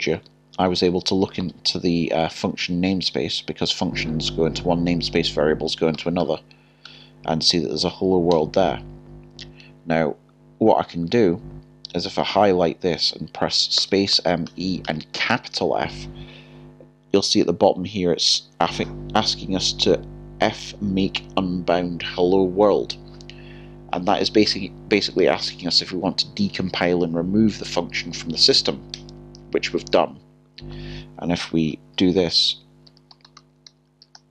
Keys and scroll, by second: 0.7 alt+3, 1.3-2.6 typing, 6.6-7.4 typing, 8.3 Tab, 13.8 b, 15.1-15.8 typing, 32.5 alt+3.